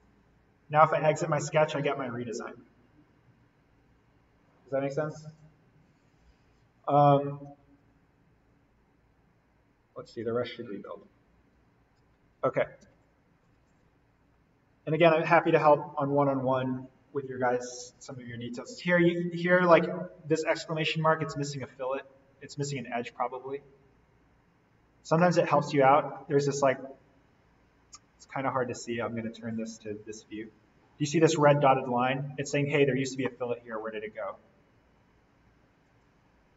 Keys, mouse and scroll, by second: 0.9-2.5 scroll up 1, 7.3-12.8 drag, 12.8 alt+v, 13.4 click, 14.3-17.4 scroll down 1, 17.5-18.2 scroll down 1, 20.3 right click, 22.5 click, 23.8 scroll down 1, 25.1 middle click, 26.4-27.2 scroll up 1, 27.2-28.5 scroll down 1, 29.2 click, 32.4-33.2 scroll up 1, 33.2-35.9 middle drag, 35.9 click.